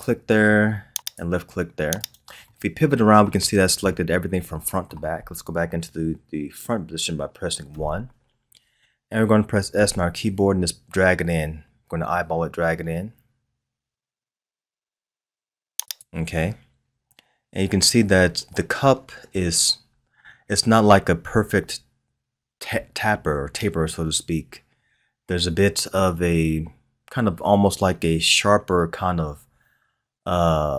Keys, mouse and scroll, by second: 2.4-3.5 middle drag, 3.5-3.8 scroll down 1, 3.8-6.9 middle drag, 7.7 KP_1, 9.7 s, 16.9-18.0 scroll up 1, 18.0-18.9 scroll down 1.